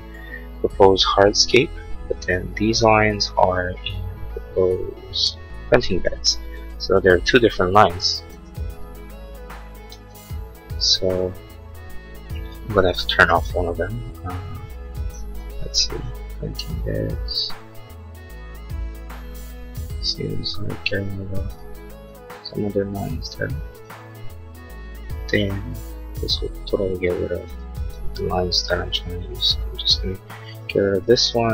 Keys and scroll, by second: 8.3 ctrl+z.